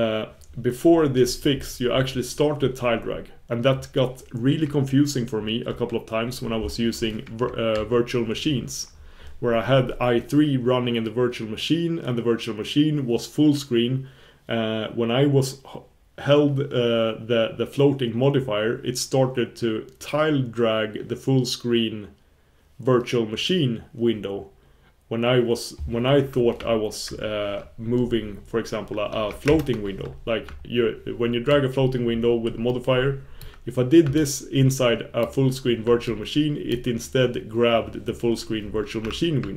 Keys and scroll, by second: 7.7 super+1.